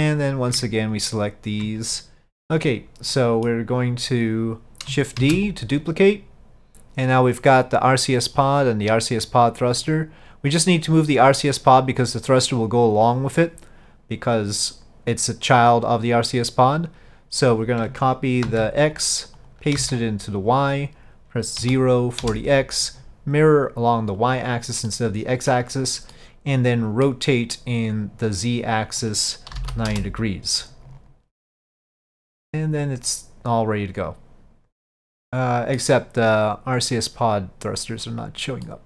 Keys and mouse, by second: 0.3 click, 1.1 ctrl+click, 2.3 ctrl+z, 3.2 middle click, 5.3 shift+d, 7.5 click, 8.0 click, 8.4 click, 9.1-19.1 drag, 19.5-20.6 drag, 20.9-22.3 drag, 23.7 click, 24.3 click, 24.9 middle click, 26.2-27.2 middle drag, 29.1-30.4 drag, 30.7-35.8 middle drag, 37.1 click, 38.7-38.8 middle drag.